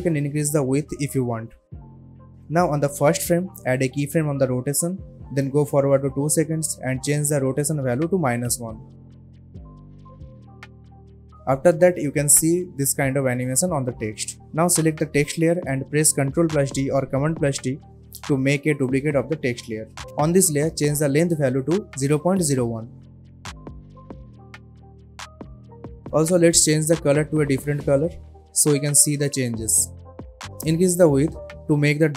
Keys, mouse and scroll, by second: 0.4 click, 1.4 Return, 2.2-2.5 scroll down 1, 2.5-8.2 drag, 10.4 Return, 11.9-12.4 click, 12.2 space, 14.4-15.2 click, 16.9 ctrl+d, 21.2 click, 24.0 Return, 26.0 click, 29.3-29.9 alt+scroll up 1, 29.9 alt+scroll down 1.